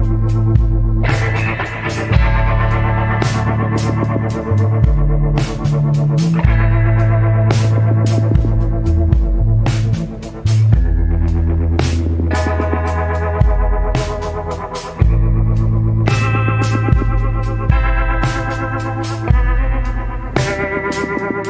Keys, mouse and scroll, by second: 2.5 scroll down 1, 4.1 scroll up 1, 7.7 scroll down 1.